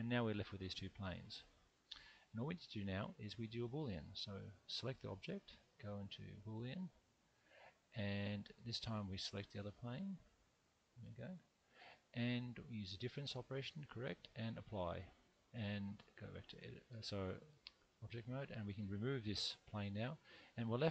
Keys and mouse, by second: 0.1-1.5 middle drag, 2.8 click, 5.6-7.0 drag, 9.9 click, 14.1 click, 16.0 Tab, 16.9 Tab, 17.5 Tab, 18.5 click, 19.4 x, 20.4 middle click.